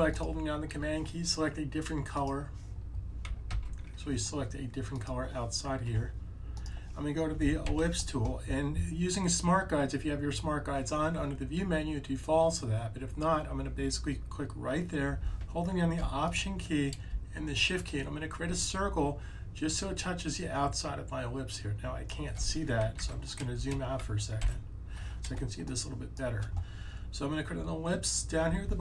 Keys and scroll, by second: 3.4 super+z, 7.5 l, 22.9 super+z, 24.3 super+-.